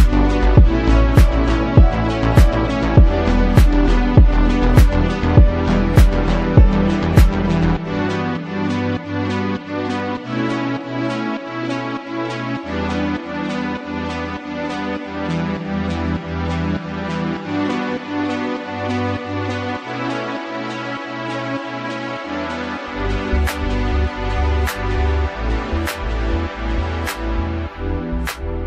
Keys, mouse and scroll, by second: 0.0-1.5 typing, 0.2 click, 0.7 click, 1.1 click, 1.3 click, 1.6 click, 2.9 ctrl+r, 2.9 ctrl+r, 3.0 click, 3.3 g, 3.5 click, 4.1 ctrl+2, 4.2 click, 4.3 click, 4.5 click, 4.8 click, 5.0 Tab, 5.0 ctrl+1, 5.1 click, 5.5 Tab, 5.5 ctrl+r, 5.5 KP_7, 5.8 click, 6.0 click, 6.2 click, 6.4-6.8 ctrl+z, 6.9 Tab, 6.9 KP_7, 7.2 click, 7.4 Tab, 7.5 click, 8.8 click, 9.1-10.8 typing, 9.6 Tab, 9.7 click, 10.4 click, 11.7 click, 12.8 click, 12.8 s, 13.1 KP_7, 13.3 z, 13.7 g, 14.5 ctrl+g, 15.2 Tab, 15.2 click, 15.4 Tab, 15.4 2, 15.7 ctrl+click, 15.8 click, 16.1 g, 16.1 click, 17.1 g, 17.2 ctrl+click, 17.5 ctrl+1, 17.5 click, 18.0 click, 18.2 Tab, 18.3 click, 18.5 click, 18.8 click, 18.9 click, 19.1 ctrl+KP_7, 19.6 click, 20.0 Tab, 20.0 1, 20.1 click, 20.2 right click, 20.3 Tab, 20.9 click, 21.0 ctrl+shift+z, 21.5 Tab, 21.5 click, 21.6 Escape, 21.8 ctrl+z, 21.9 ctrl+z, 22.4 g, 22.5 alt+click, 22.6 s, 23.3 right click, 23.4 click, 23.6 Tab, 23.7 click, 24.0 g, 24.2 click, 24.5 click, 24.7 click, 25.2 click, 25.5 click, 26.0 click, 26.3 Tab, 26.4 click, 26.5 KP_7, 26.7 click, 26.8 Tab, 26.8 click, 28.0 Tab, 28.3 click.